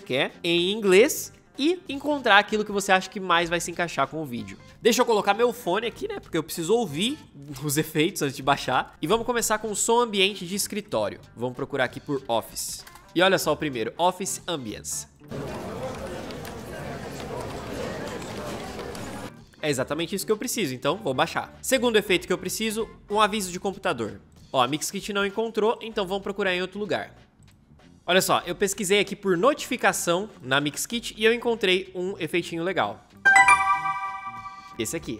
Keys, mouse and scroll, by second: 12.0-13.1 typing.